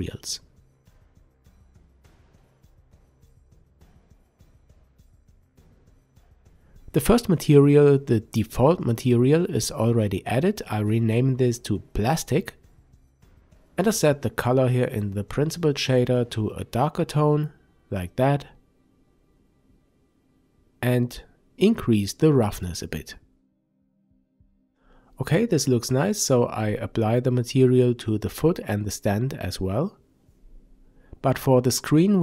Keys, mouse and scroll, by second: 4.3 click, 6.0 click, 6.2-12.6 drag, 9.8 Return, 19.2-21.6 drag, 21.6-25.7 middle drag, 25.7 click, 27.0-29.7 drag, 29.7-32.2 middle drag.